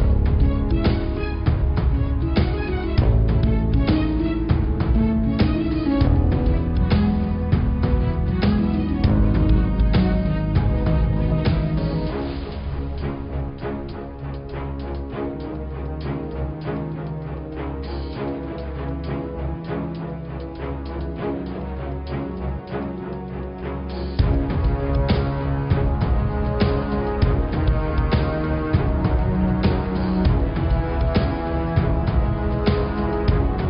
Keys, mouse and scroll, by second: 0.5 click, 0.8-1.4 scroll down 4, 1.4-2.5 middle drag, 2.5 scroll up 4, 2.8-4.9 middle drag, 4.9 scroll down 4, 5.2 middle click, 5.5-6.2 scroll up 2, 13.6 click, 15.5-17.8 drag, 21.4 click, 21.6-22.2 scroll up 9, 23.2 click, 24.0-25.1 scroll down 5, 25.1 click, 25.5-26.1 scroll up 4, 26.1 click, 27.4 click, 28.8-33.1 drag.